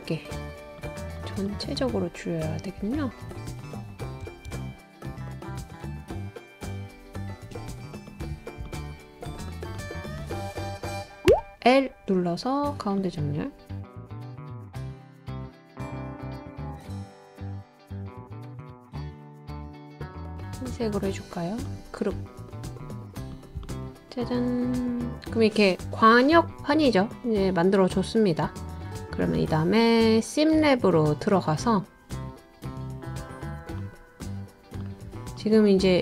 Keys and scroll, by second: 11.3 |, 16.9 Up, 17.1 Up, 17.2 typing.